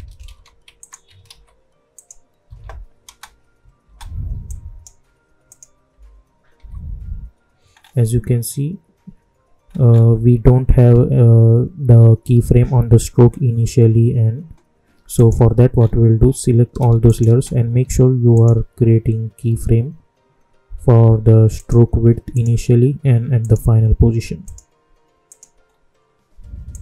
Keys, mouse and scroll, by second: 0.2 ctrl+v, 0.7 alt+click, 1.2 ctrl+v, 1.9 click, 2.4 `, 3.0 space, 4.4 click, 5.8-6.6 typing, 7.6 scroll down 1, 9.6 scroll up 1, 15.1 click, 15.7 scroll down 1, 17.0 shift+click, 21.5 click, 22.5 scroll up 1, 23.3 click, 23.7-24.3 scroll up 1, 24.4 click, 25.6-26.7 scroll up 1, 26.7 click.